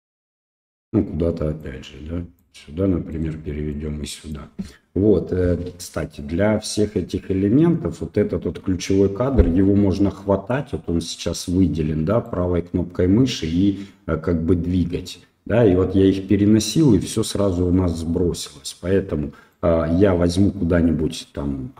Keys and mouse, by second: 1.6 click, 3.1 right click, 3.7 click, 6.1-6.8 drag, 12.2-17.1 drag, 19.5-21.7 drag.